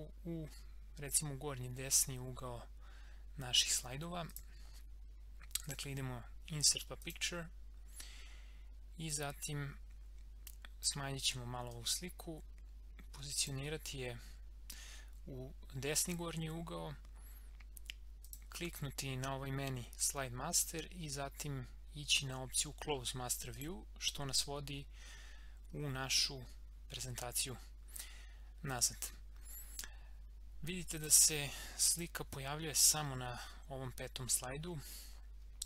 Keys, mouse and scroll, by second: 1.1 click, 4.3-15.8 drag, 18.2 click, 23.5 click, 24.8 scroll up 1, 27.6 scroll down 1, 29.0 scroll up 1, 31.0 click, 35.1 scroll down 1.